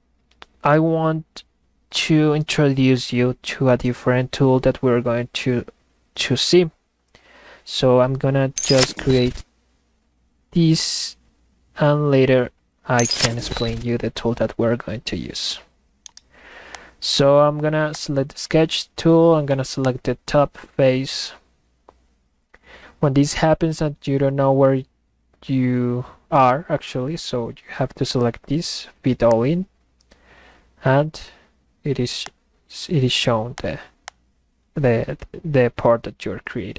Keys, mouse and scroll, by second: 16.0-16.4 middle drag, 16.2 right click, 16.7 click, 17.9 click, 29.3 click, 32.3 click, 33.6 ctrl+click, 34.1 ctrl+click.